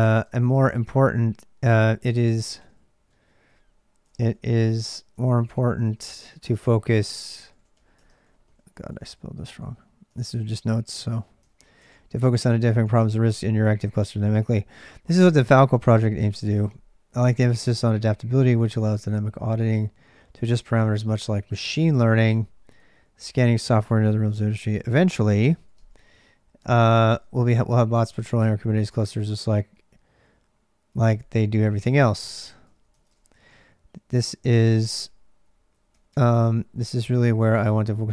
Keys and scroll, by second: 0.0-38.1 typing, 0.7 ctrl+[, 27.0 ctrl+[.